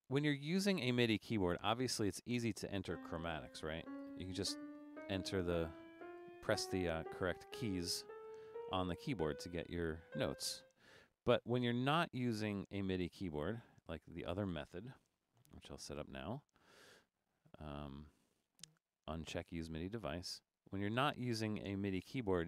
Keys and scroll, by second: 3.6-9.4 typing, 10.4 typing, 12.5 Escape, 15.0 BackSpace, 22.1 Down, 22.4 Down.